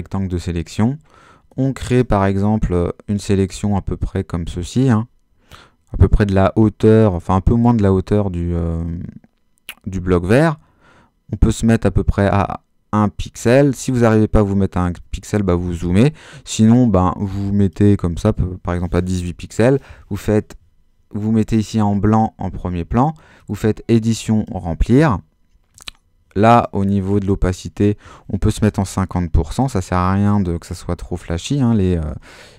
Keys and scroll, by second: 28.4-29.2 typing.